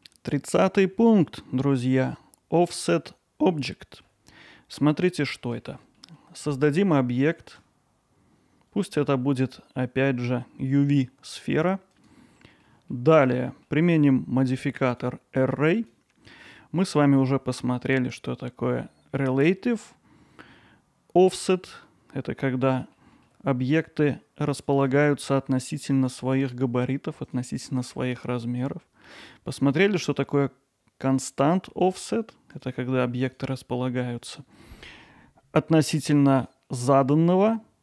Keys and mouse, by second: 2.1 middle click, 3.7-4.0 alt+middle drag, 4.5 middle click, 5.2 alt+middle click, 5.6 ctrl+alt+middle click, 6.0-6.3 middle drag, 12.4 middle drag, 12.9 ctrl+alt+middle drag, 13.5 middle click, 14.9-15.9 drag, 16.4 middle click, 22.6 middle drag, 23.2 alt+middle click, 24.4 click, 24.6 click, 24.9 click, 27.3 click, 28.6 click, 29.6 click, 32.5 click, 33.3 click, 36.5-37.8 drag.